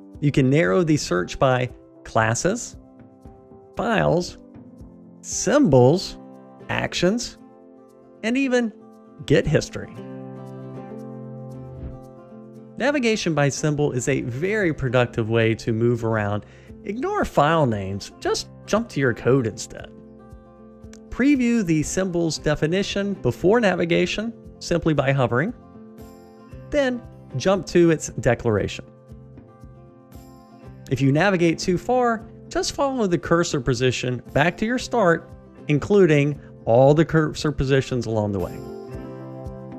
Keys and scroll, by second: 27.4 super+b, 34.0 super+b, 34.4 super+b, 37.3 alt+super+[.